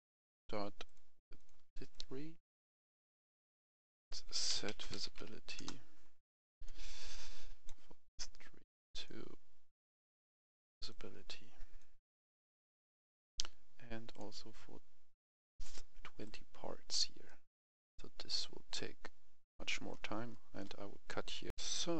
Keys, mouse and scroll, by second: 0.8 shift+click, 1.3 shift+click, 1.8 click, 2.8-3.6 scroll up 1, 3.6 click, 4.2-5.1 typing, 5.5 Return, 6.6-14.0 drag, 14.4-15.3 scroll up 1, 15.5 shift+click, 16.2 click, 17.2-18.2 right drag, 18.4 click, 19.6 right click, 20.0 scroll down 1, 20.3 right click, 20.9-21.4 scroll up 1, 21.4 right click, 21.5 F10.